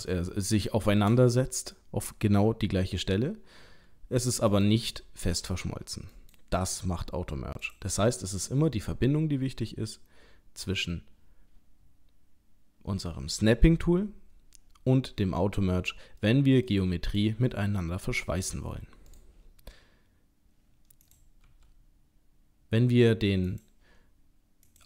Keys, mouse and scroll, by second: 0.4 shift+middle click, 1.3-1.7 scroll up 1, 1.7 middle click, 3.7 g, 5.3 g, 7.6 click, 8.5 middle click, 16.1 middle click, 17.1 click, 17.5 middle click, 18.4 g, 21.0 click, 21.4 g, 24.7 click.